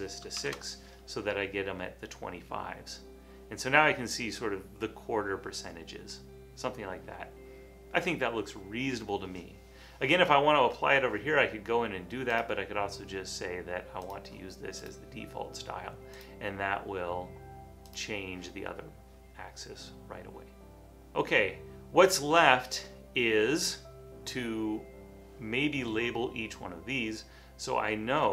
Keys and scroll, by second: 0.5 Return.